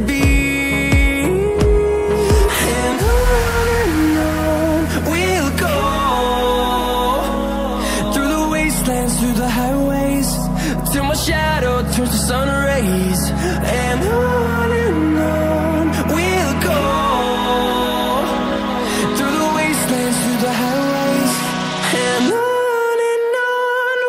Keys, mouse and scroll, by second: 0.0 scroll up 1, 0.4 click, 1.5 click, 1.5 scroll down 1, 1.9-2.5 scroll up 1, 2.6 Right, 4.4 click, 11.8 click, 17.3 click, 20.6 double click, 21.1-22.3 scroll up 1, 22.3 click.